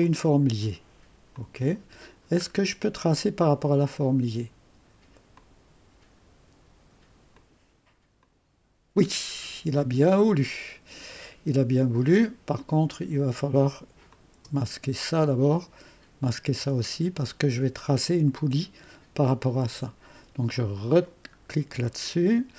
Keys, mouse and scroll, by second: 0.0 click, 1.3 click, 2.5-3.2 scroll down 2, 3.5 click, 5.3 click, 7.3 click, 8.2 click, 9.8-11.3 drag, 12.6 click, 14.1 click, 16.2 click, 16.6 space, 20.5 click, 21.5 scroll up 1, 21.6 middle click, 21.9-22.5 right drag.